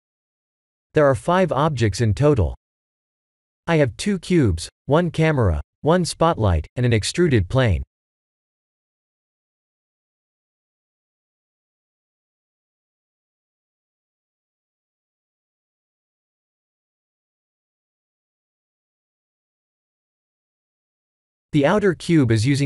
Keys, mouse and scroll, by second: 0.1 a, 1.0-5.4 middle drag, 8.0-11.6 middle drag, 12.9 click, 13.5-16.1 middle drag, 17.9-21.1 middle drag.